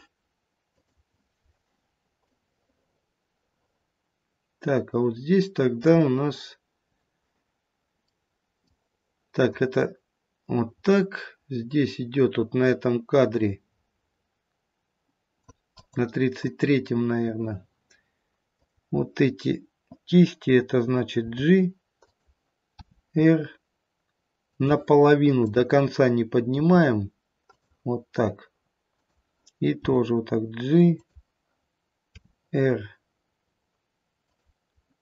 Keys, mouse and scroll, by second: 2.3 click, 8.1 middle click, 8.2 middle click, 9.5 click, 15.7 click, 16.5 click, 21.3 click, 21.3 g, 22.9 r, 25.3 click, 26.5 r, 28.9 click, 29.8 g, 32.7 r.